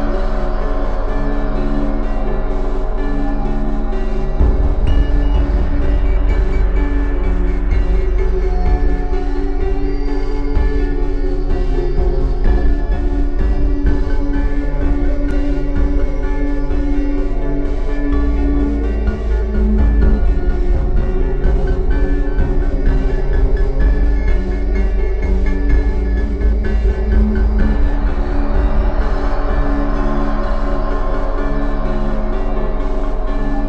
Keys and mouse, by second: 2.9-13.1 drag, 13.1 shift+d, 18.9-21.1 drag, 22.8 KP_3, 24.4 click, 25.5-26.7 middle drag, 29.5-33.6 middle drag.